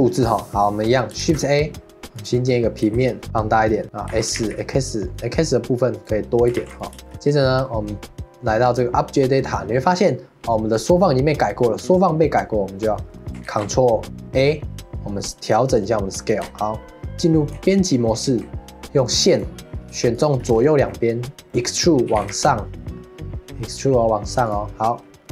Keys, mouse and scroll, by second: 0.0-1.2 middle drag, 1.2 shift+a, 2.9 s, 3.8 middle click, 4.1 s, 6.6 ctrl+s, 7.0 shift+middle click, 7.1 Tab, 8.6 click, 12.8-13.5 middle drag, 13.5 ctrl+a, 16.4 Tab, 17.9 middle click, 18.3 2, 19.3 click, 20.1 shift+click, 20.5-20.9 scroll down 2, 20.9-22.1 middle drag, 22.1 e, 24.9 middle click.